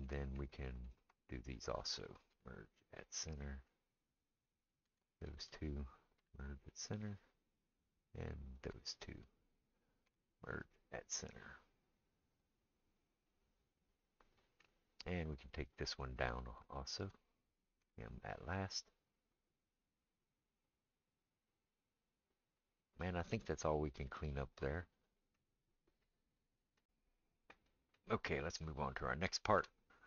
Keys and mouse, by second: 0.9 shift+middle click, 1.2 shift+click, 1.3-8.5 shift+middle drag, 2.3 m, 4.4 click, 6.2 m, 8.5 click, 8.6-30.0 shift+middle drag, 10.1 m, 15.3 click, 16.8 shift+click, 17.8 m.